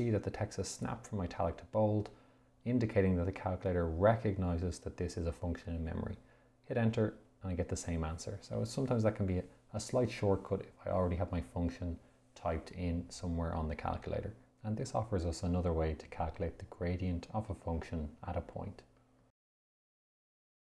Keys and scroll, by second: 0.9 x, 7.0 Return.